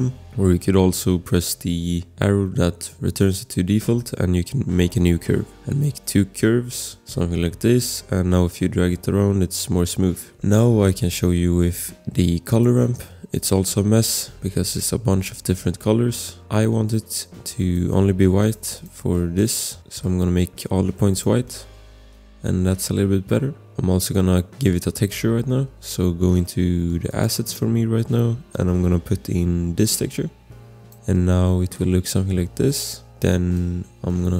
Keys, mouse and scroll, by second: 0.0 Delete, 0.2 click, 2.7 click, 5.6 click, 6.0 click, 7.8 click, 10.1 ctrl+z, 12.5 click, 18.4 click, 21.1 click, 21.7 click, 23.7 ctrl+z, 27.1 click, 32.9 ctrl+z, 33.5 click.